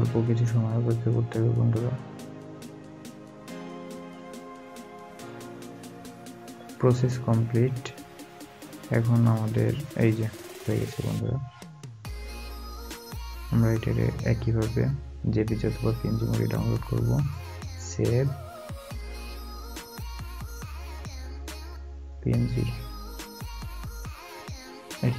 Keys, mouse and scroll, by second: 1.3 scroll down 1, 5.7 scroll down 1, 5.8 scroll up 1, 7.9 scroll down 1, 13.5 scroll down 1, 13.6-14.4 scroll up 1, 15.2 scroll down 1.